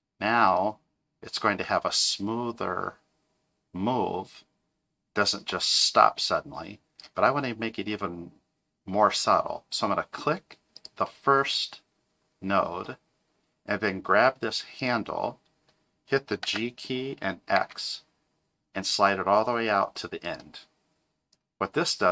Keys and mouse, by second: 0.6-7.0 drag, 10.7 click, 14.8 click, 16.4 g, 21.3-22.1 drag.